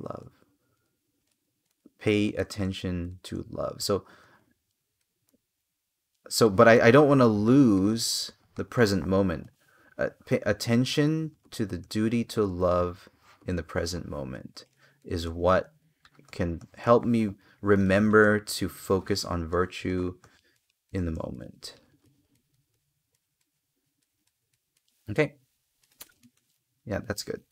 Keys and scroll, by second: 6.5 space, 9.1 space, 17.4 space, 25.5 space, 27.4 space.